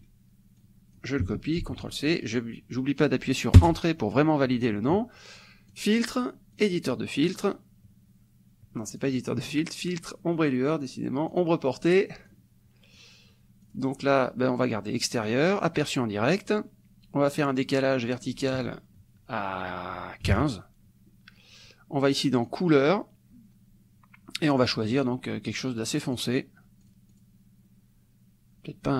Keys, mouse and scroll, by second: 0.6 click, 1.9 ctrl+c, 3.6 Return, 5.8 click, 6.7 click, 9.0 click, 11.4 click, 12.3 click, 13.7 click, 15.6 click, 18.2 click, 20.3 KP_1, 20.9 KP_5, 22.5 click, 25.0-26.4 drag, 26.8 click.